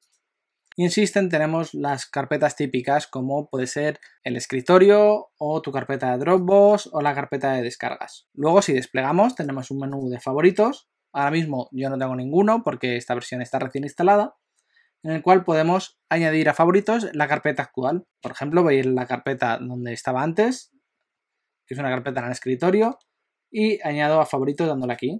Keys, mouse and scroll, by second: 0.0 click, 6.6 click, 9.4 click, 9.9 click, 18.0 click, 24.8 click.